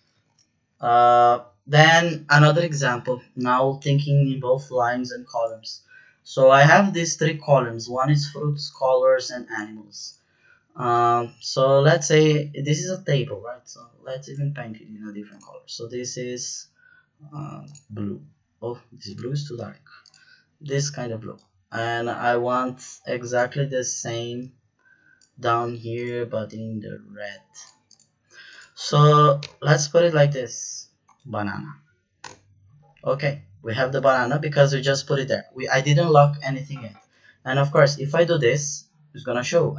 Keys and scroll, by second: 0.1 ctrl+z, 32.2 Return.